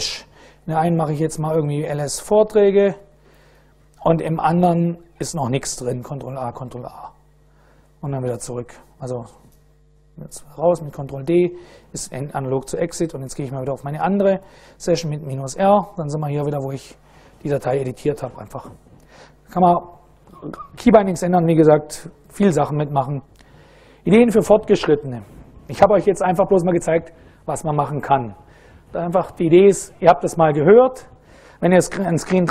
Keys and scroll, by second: 0.0-2.8 typing, 3.0 Return, 4.5 ctrl+a, 4.8 ctrl+a, 7.5 ctrl+a, 8.8 ctrl+d, 10.3 ctrl+d, 12.6-14.5 typing, 15.3 Return, 17.0 Up, 17.3 Up, 17.6 Up, 17.8 Down, 18.0 Down.